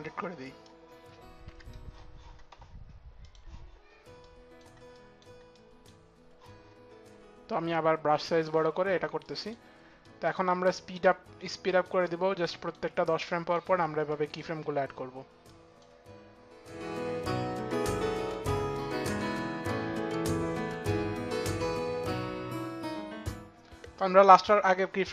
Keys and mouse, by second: 2.9 click, 4.5 click, 5.2 click, 7.4 click, 8.9 click, 9.7 click, 10.4 click, 11.6 click, 12.2 click, 14.6 click, 15.1 click, 17.1 ctrl+z, 17.2 click, 17.4 click, 17.5 shift+Page_Down, 17.6 click, 17.9 click, 18.0 shift+Page_Down, 18.1 click, 18.6 click, 18.9 shift+Page_Down, 19.0 click, 19.0 u, 19.1 click, 19.3 click, 19.5 click, 19.8 click, 20.4 shift+Page_Down, 20.5 click, 20.6 click, 21.1 click, 21.2 click, 21.4 shift+Page_Down, 21.5 click, 21.5 click, 21.8 click, 21.8 shift+Page_Down, 21.9 click, 22.0 click, 22.0 click, 22.2 click, 22.6 click.